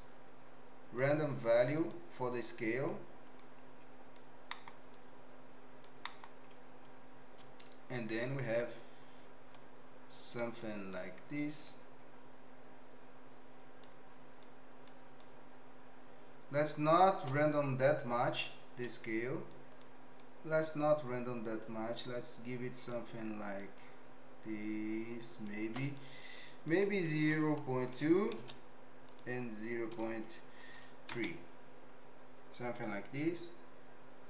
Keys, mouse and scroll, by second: 3.4 click, 4.5 middle click, 5.0 click, 6.1 middle click, 7.7-10.9 shift+drag, 11.4-13.9 shift+drag, 14.5 shift+click, 15.2-17.0 shift+drag, 19.5 shift+click, 20.1-23.0 shift+drag, 23.6-25.5 shift+drag, 25.8 click, 26.6-28.5 drag, 29.1-31.2 drag.